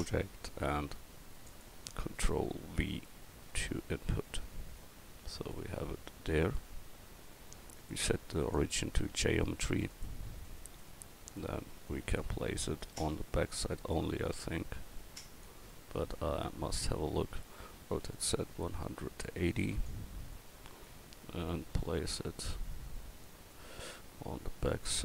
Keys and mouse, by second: 3.5 ctrl+v, 9.1 s, 17.8 r, 20.4 click, 24.9-25.0 middle drag.